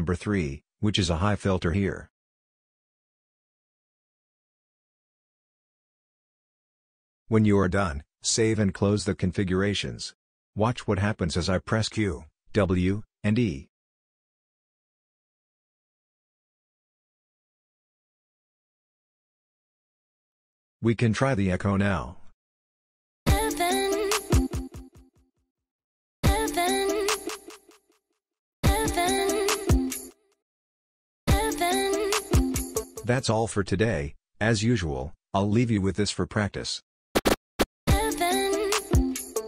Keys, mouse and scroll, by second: 9.0 click, 12.7 q, 14.7 w, 16.3 e, 17.9 e, 19.1 w, 20.1 q, 23.2 c, 24.1 q, 25.8 q, 26.2 c, 27.0 q, 28.6 c, 29.5 q, 31.3 c, 32.1 q, 33.0 q, 37.2 y, 37.3 y, 37.9 c, 38.7 space.